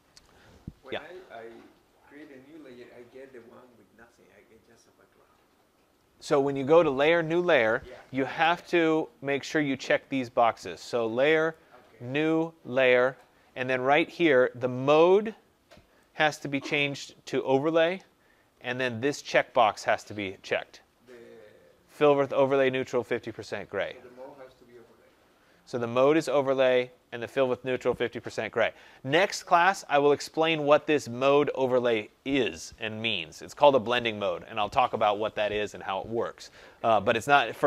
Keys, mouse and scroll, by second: 11.4 click, 13.1 click, 16.1 click, 17.8 click, 19.3 click.